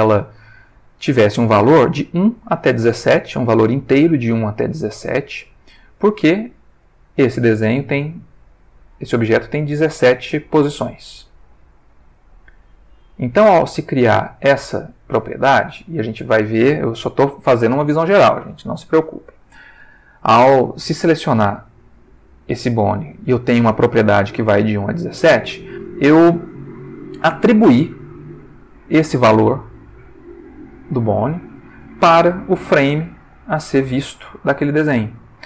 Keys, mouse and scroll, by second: 5.7 click, 6.8 click, 7.5 Tab, 9.8-15.0 drag, 15.2 Tab, 18.9 click, 19.8 Tab, 21.2 click, 27.9-35.4 drag.